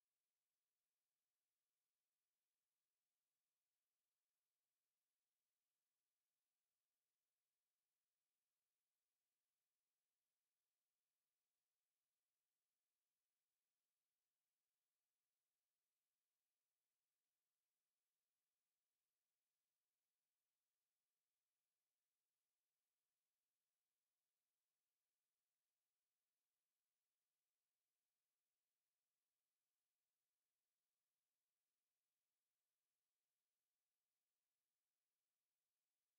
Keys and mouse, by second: 1.0 alt+click.